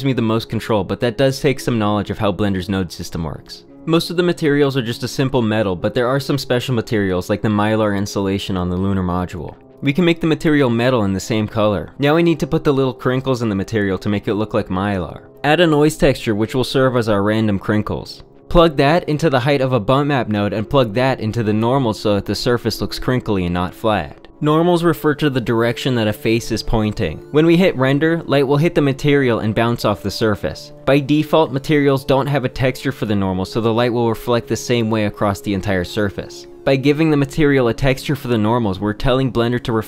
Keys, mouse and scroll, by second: 3.3 shift+middle click, 6.3 shift+middle click, 6.9 shift+click, 7.4 click, 11.1 click, 11.9 click, 13.9 click, 15.7 shift+a, 20.7 g, 21.1 ctrl+t, 21.5 click, 22.5 click, 33.6 g, 36.9 click, 37.3 shift+a, 38.0 ctrl+t, 39.1 shift+click.